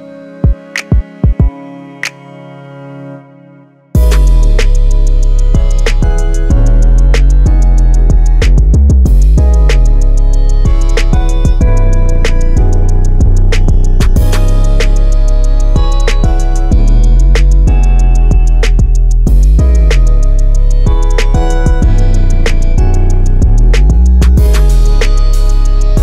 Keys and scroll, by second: 1.2 typing, 4.9 Return.